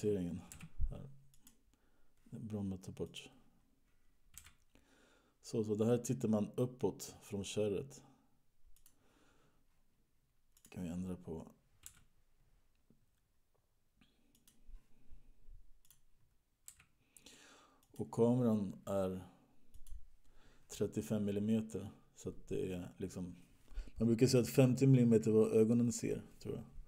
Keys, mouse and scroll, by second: 1.1 g, 3.3 click, 5.0 g, 11.0 click, 12.6 g, 16.2 click, 17.2 g, 19.9 click, 24.4 click.